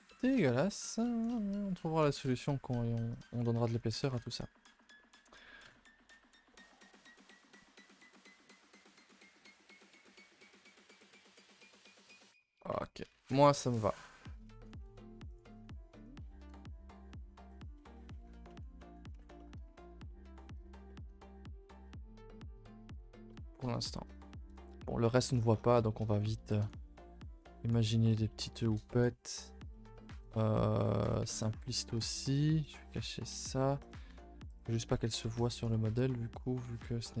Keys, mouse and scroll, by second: 0.7 middle click, 1.7 a, 1.8 a, 2.2 ctrl+s, 3.1 click, 3.3 Tab, 3.5 a, 3.7 a, 4.0 ctrl+s, 4.1 scroll down 2, 4.3-5.1 middle drag, 5.1-5.6 scroll down 2, 5.6 KP_0, 7.3 click, 7.6 click, 9.2 click, 9.9 click, 10.8 click, 14.0 click, 17.8 middle click, 18.2-18.5 scroll up 4, 18.5 Tab, 18.8 middle click, 19.1 ctrl+s, 19.3 shift+middle drag, 19.6 scroll up 3, 21.3 middle click, 21.9-24.4 middle drag, 24.4 KP_0, 25.8-26.1 middle drag, 26.1-26.8 scroll up 8, 26.4 shift+middle drag, 26.9-27.4 middle drag, 27.5-27.8 middle drag, 28.0 scroll up 3, 28.1 middle drag, 28.7-30.4 middle drag, 30.7 middle drag, 31.0 click, 31.2 Tab, 31.3 middle drag, 31.5 middle drag, 31.8 scroll down 1, 31.9 Tab, 32.6 click, 33.3 h, 33.8 click, 34.0 Tab, 34.4 click, 34.6 Tab, 34.8 middle click, 35.0 scroll up 2, 35.1 a, 35.2 a, 35.4 shift+middle click, 36.3 click, 36.6 a, 36.7 a, 36.8 middle click, 37.1 2.